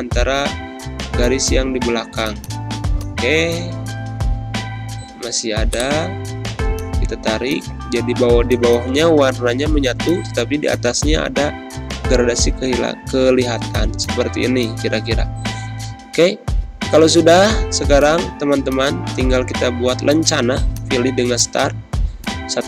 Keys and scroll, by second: 4.0 g, 9.5 ctrl+End, 9.6 Return.